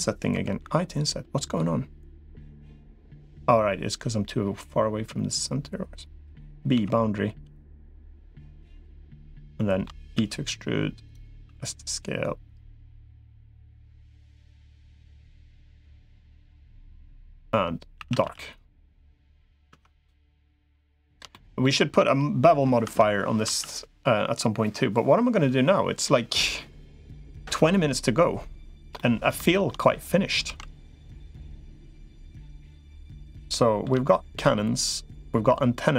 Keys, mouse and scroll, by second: 0.1 i, 8.8 middle click, 9.3 shift+middle click, 10.1 e, 11.3 s, 14.3 middle click, 14.9 middle click, 16.1-17.3 drag, 17.9 a, 18.1 g, 19.5 Tab, 20.1 middle click, 20.7 shift+middle click, 21.1 middle click, 23.3 Tab, 28.8 middle click, 29.3 shift+middle click, 30.3 ctrl+s, 30.7 middle click, 31.2 shift+middle click, 31.7 middle click, 33.1 middle click, 33.9 shift+middle click.